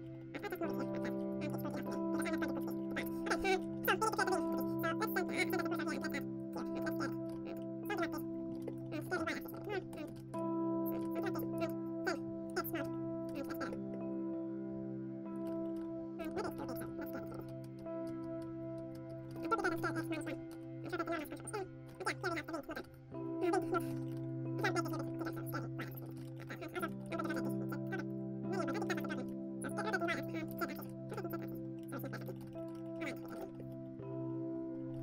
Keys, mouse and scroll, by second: 0.0-1.8 middle drag, 0.3-2.9 drag, 1.9 middle click, 2.6-6.3 middle drag, 4.6 a, 4.9 right click, 5.7-7.2 typing, 7.5 middle click, 7.9 click, 8.3-10.6 middle drag, 8.9-10.9 typing, 10.4-11.5 drag, 11.5 middle click, 12.3 click, 12.4 middle click, 12.5 a, 12.7-13.7 right drag, 13.4 ctrl+b, 13.7 middle click, 15.4-16.8 middle drag, 15.4 Tab, 15.7 Tab, 16.3 ctrl+KP_Add, 16.8 ctrl+KP_Add, 16.8 s, 17.4-19.7 drag, 18.4 s, 19.1 middle click, 19.3 shift+d, 19.7 s, 20.8 ctrl+n, 20.9 click, 21.8 Tab, 21.9 middle click, 22.6-23.6 right drag, 23.6 ctrl+s, 23.6 click, 23.8-27.2 typing, 24.0 Tab, 24.5 middle click, 25.7 Tab, 26.2 ctrl+s, 26.2 middle click, 26.3 Tab, 27.2 middle click, 28.4 click, 28.5-30.0 middle drag, 29.2 r, 30.5 z, 30.8 z, 31.0 r, 31.5-32.5 middle drag, 32.2 Tab, 32.4 ctrl+s, 32.5 click, 33.1 ctrl+s, 33.3 ctrl+s.